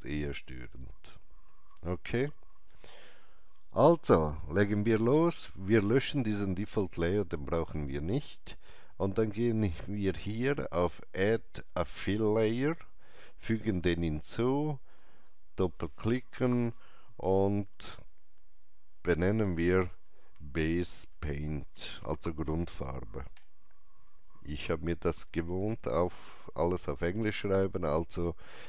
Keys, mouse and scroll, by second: 0.1-2.7 drag, 6.5-7.9 drag, 12.0 click, 14.9 click, 15.1 click, 19.2-22.4 typing, 23.3 Return.